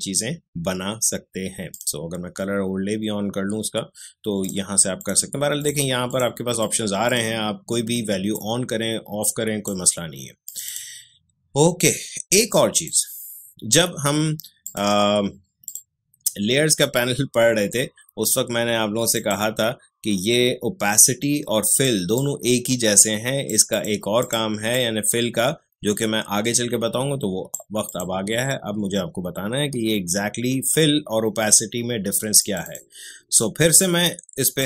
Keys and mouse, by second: 1.7 click, 4.4-14.6 drag, 19.1 click, 21.6-27.8 drag, 32.4-34.6 drag.